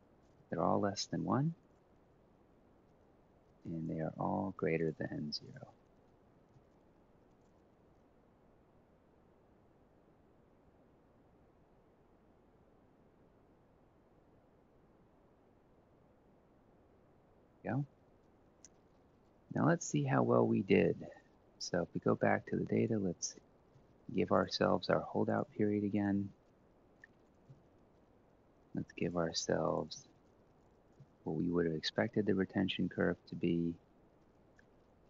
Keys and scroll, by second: 0.3 1, 6.2 0, 23.6 ctrl+c, 25.2 ctrl+v, 25.9 ctrl+c, 27.2 ctrl+v, 29.7 ctrl+c, 30.8 ctrl+v.